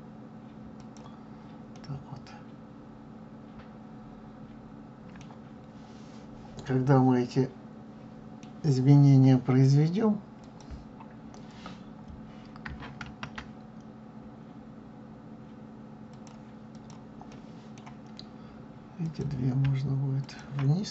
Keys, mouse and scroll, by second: 1.7-4.7 middle drag, 5.4-6.6 scroll down 3, 6.6-8.9 middle drag, 8.9-9.2 scroll up 2, 10.4 click, 13.0 ctrl+a, 16.7 click, 17.3-19.0 middle drag, 19.0 click, 20.2 shift+click.